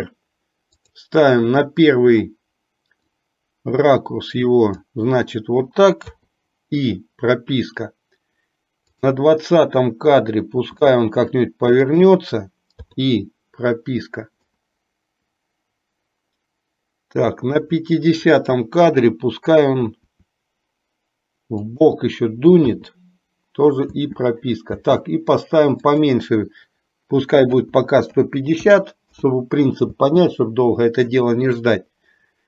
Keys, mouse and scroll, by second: 3.2-5.2 drag, 6.3 i, 9.2 click, 10.8 r, 13.1 i, 14.7-17.8 drag, 20.2 r, 23.1 i, 24.0 space, 26.0-29.3 drag, 26.0 space, 30.2 space.